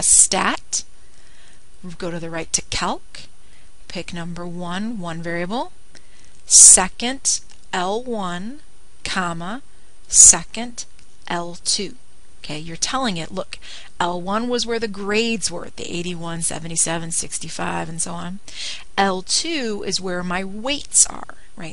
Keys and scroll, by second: 3.8 Right, 6.0 1, 9.4 1, 10.7 ,, 13.0 2.